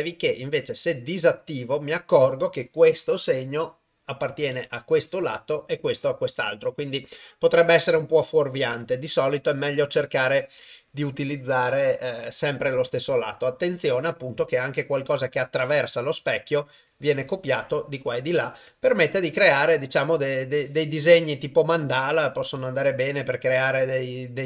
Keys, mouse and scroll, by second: 14.6 click, 16.9 click, 18.7 click, 20.5 click, 21.1 click, 21.7 click, 22.6 click, 23.8 click.